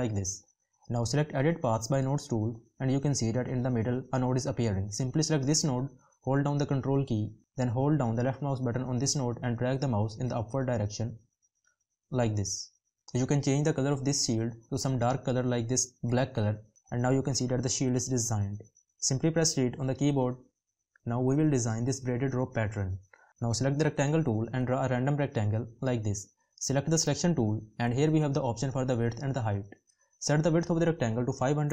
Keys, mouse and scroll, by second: 6.7 ctrl+click.